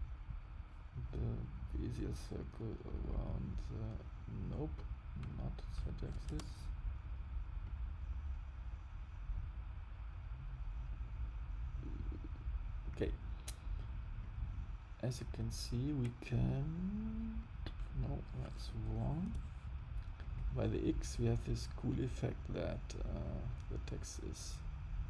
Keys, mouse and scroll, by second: 0.3 click, 3.0 click, 7.6 click, 14.1 click, 15.8 click, 20.1 click.